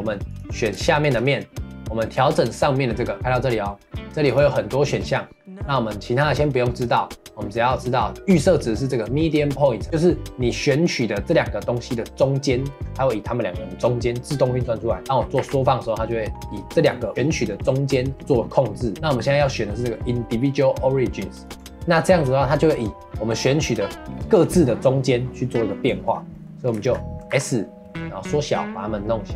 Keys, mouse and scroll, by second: 0.3 click, 1.0 shift+click, 3.1-7.4 drag, 18.9-21.8 drag, 22.5-25.5 middle drag, 25.8 middle click, 26.6 scroll up 1, 26.8 shift+middle click, 27.3 s.